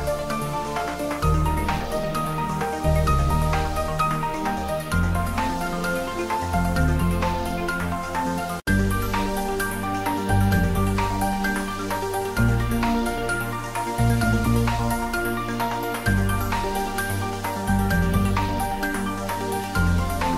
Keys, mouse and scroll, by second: 2.4 scroll up 1, 4.9-7.8 drag, 7.8 scroll up 1, 8.8-10.8 drag, 11.0-12.7 drag, 12.7-15.5 drag, 15.9 middle click, 16.6 scroll down 1, 17.9-19.7 middle drag, 19.7 click.